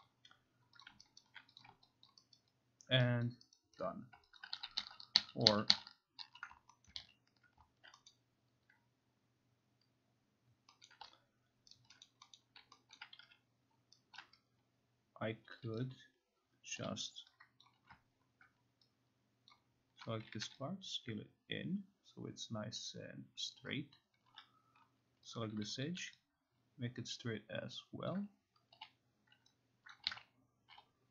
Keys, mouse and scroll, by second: 0.0 click, 0.8 click, 1.2 alt+right click, 1.6 click, 2.1 alt+click, 2.4 alt+right click, 3.3 alt+click, 4.1 alt+right click, 4.4 alt+click, 4.6 ctrl+z, 4.8 ctrl+z, 5.2 ctrl+z, 5.5 ctrl+z, 5.7 ctrl+z, 6.2 ctrl+z, 6.9 alt+middle click, 7.0 ctrl+z, 8.1 middle click, 10.9 middle click, 11.7 alt+right click, 12.0 middle click, 12.4 middle click, 13.0 alt+middle click, 13.2 alt+middle click, 13.2 q, 14.2 right click, 15.8 click, 16.8 0, 17.6-19.0 drag, 19.5 click, 20.4 typing, 23.6 click, 24.0-24.8 typing, 25.4 click, 26.0 typing, 28.1 click, 28.5-29.3 typing, 29.9 click, 30.1 ctrl+z.